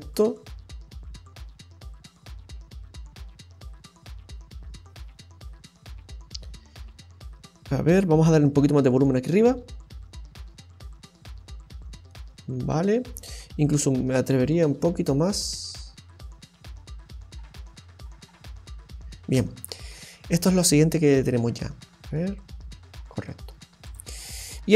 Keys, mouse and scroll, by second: 0.8-1.3 scroll down 2, 1.1-2.0 scroll up 2, 2.0-2.3 scroll down 1, 2.3-2.6 scroll down 3, 7.3-7.7 scroll up 2, 8.3 click, 13.6 click, 19.2 space, 19.7-20.2 scroll up 2, 20.7 middle click, 23.8 click, 24.2-24.6 scroll down 3.